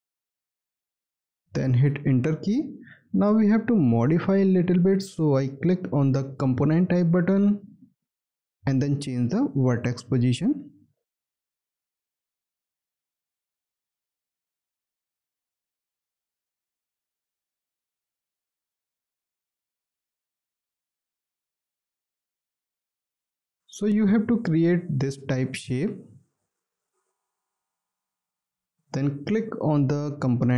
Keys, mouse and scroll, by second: 1.7 Return, 3.1 scroll up 1, 3.8 alt+middle click, 4.3 alt+scroll up 1, 5.1 scroll up 1, 5.7 alt+middle click.